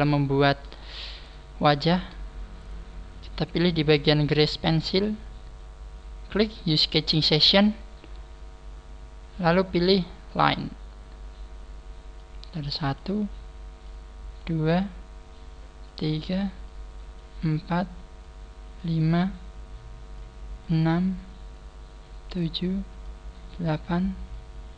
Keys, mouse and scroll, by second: 0.9 shift+middle click, 1.4 scroll up 1, 6.4 click.